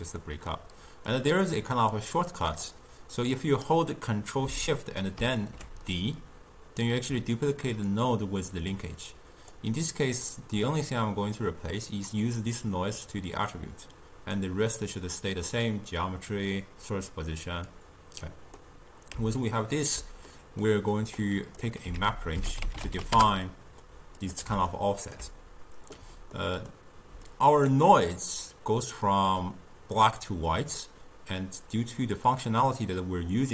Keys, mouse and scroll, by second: 0.3-1.2 middle drag, 1.2-2.8 drag, 3.3 click, 5.3 ctrl+shift+d, 8.8-9.8 drag, 10.8-12.4 drag, 17.8 click, 18.7-21.3 middle drag, 21.3 click, 22.1 ctrl+a, 24.8-27.4 ctrl+middle drag, 27.4 click, 28.9-33.2 middle drag.